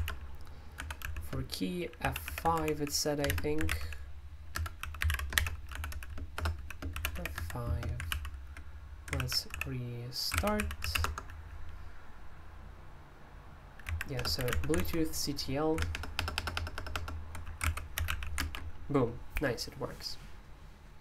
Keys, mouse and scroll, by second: 0.0-8.1 typing, 9.2 super+l, 9.5-11.4 typing, 13.9-15.3 typing, 15.8 ctrl+w, 15.9 ctrl+w, 16.4 ctrl+w, 16.5 ctrl+w, 16.9 ctrl+w, 17.6 ctrl+u, 17.7-18.6 typing.